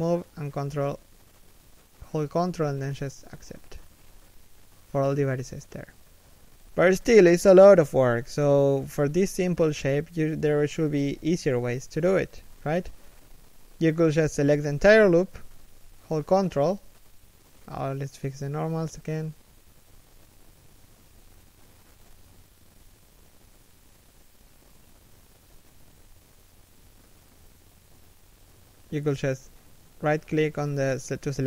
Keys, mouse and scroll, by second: 0.0 right click, 0.2 g, 1.3 scroll down 1, 1.8 z, 2.0 middle click, 3.0 3, 3.9 1, 10.7 a, 11.1 alt+right click, 12.0 g, 14.8 z, 15.3 middle click, 18.0 a, 18.9 ctrl+n, 20.8 middle click, 24.0 a, 24.9 ctrl+n, 26.3 a, 26.7 z, 27.0 3, 28.0 1, 30.0 alt+right click.